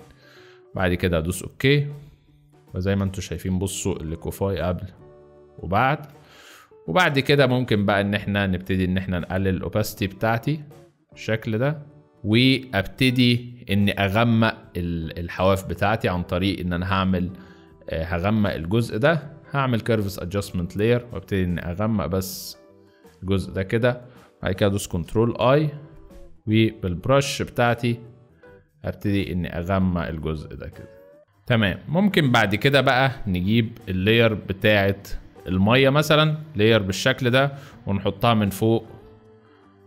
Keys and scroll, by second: 1.9 z, 6.0 space, 24.7 ctrl+i, 26.3 b, 31.2 space, 31.6 z.